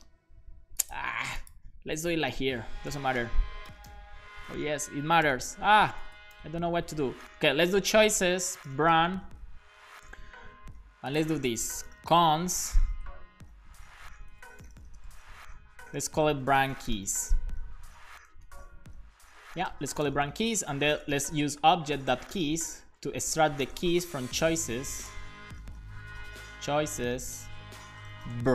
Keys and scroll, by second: 2.1-8.7 typing, 8.7 Return, 11.7-12.5 typing, 12.9 Return, 13.6 super+z, 14.3 shift+super+Left, 14.4-15.5 typing, 16.6-17.5 typing, 19.8-25.8 typing, 21.6 Return, 27.4 Return, 27.9-28.5 typing.